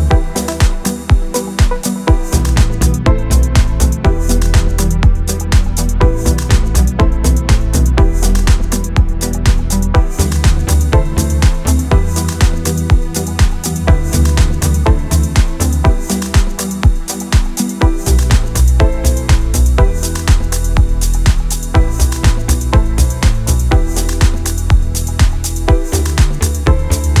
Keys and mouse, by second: 0.0 KP_3, 1.8 shift+middle click, 2.1 shift+middle click, 2.5 middle click, 2.8 Tab, 3.1 shift+middle click, 3.5-7.6 typing, 3.5 click, 5.4 click, 5.9 click, 6.1 right click, 6.4 click, 7.8 middle click, 8.4 middle click, 8.5 middle click, 8.6 middle click, 8.8 middle click, 8.9 middle click, 9.4 click, 9.6 middle click, 9.8 middle click, 10.7 KP_3, 11.9-12.4 typing, 11.9 ctrl+z, 12.3 click, 12.6 middle click, 12.7 middle click, 12.8 ctrl+z, 13.0 middle click, 13.2 click, 13.2 middle click, 13.8 KP_3, 14.1 middle click, 15.3 middle click, 16.6-19.3 typing, 18.1 shift+middle click, 18.2 shift+middle click, 18.3 click, 18.6 shift+middle click, 18.8 middle click, 19.1 middle click, 19.4 middle click, 19.7 middle click, 20.0 middle click, 20.1 middle click, 20.4 ctrl+z, 20.6 ctrl+z, 20.6 middle click, 21.2 ctrl+r, 21.4 middle click, 21.8 middle click, 22.9 KP_3, 24.1 middle click, 24.6 middle click, 24.8-27.2 typing, 25.0 middle click, 25.3 click, 25.5 right click, 25.7 click, 25.8 middle click, 26.0 middle click, 26.2 click, 26.4 middle click, 26.7 middle click, 27.0 middle click.